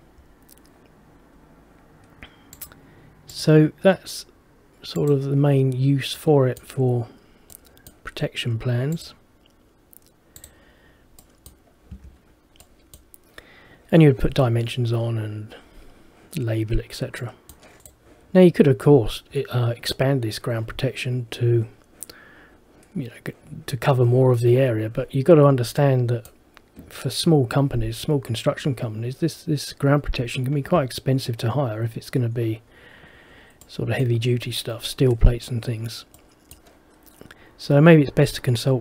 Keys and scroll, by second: 12.0 Escape.